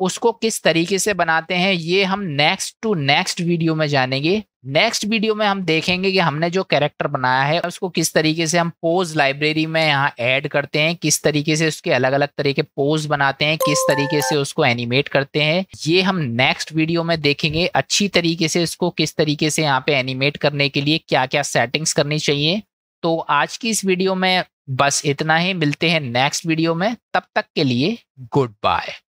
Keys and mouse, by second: 0.9-2.9 middle drag, 4.2-4.6 shift+middle drag, 5.9 click, 7.7-8.5 middle drag, 10.6-11.3 middle drag, 12.2-12.8 middle drag, 14.4-15.2 middle drag, 19.5-22.7 middle drag, 23.6-25.0 shift+middle drag, 29.0 middle click.